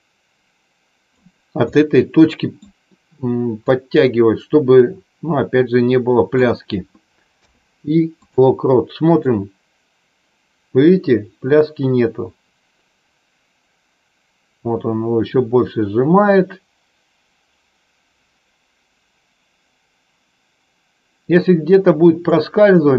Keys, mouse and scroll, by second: 1.5-2.5 middle drag, 3.5-6.4 drag, 9.4-22.5 drag.